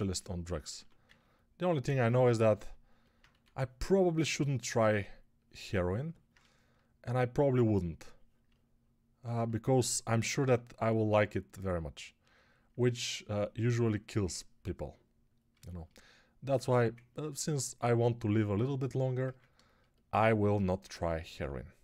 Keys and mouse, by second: 0.6 1, 3.2 2, 10.0 g, 16.5 1, 20.4 g.